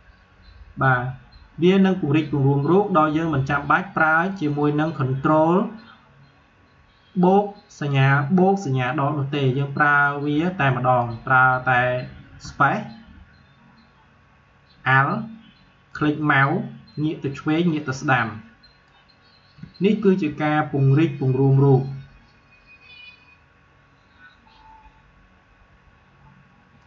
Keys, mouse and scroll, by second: 9.9-12.3 drag, 12.3 space, 15.9-21.7 alt+drag, 26.8 click.